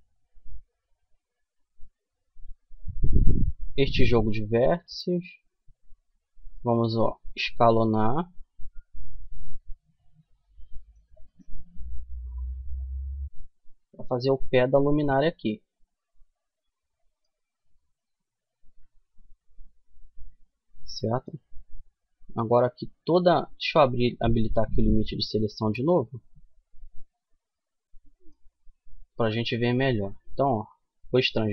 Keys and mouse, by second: 0.8 a, 2.1-3.5 right drag, 3.5-4.8 middle drag, 6.4 s, 10.7-14.3 middle drag, 11.6 Tab, 16.7 Tab, 17.1-19.0 middle drag, 20.9-23.3 middle drag, 23.3-24.3 drag, 24.3-30.8 middle drag, 31.2 ctrl+r.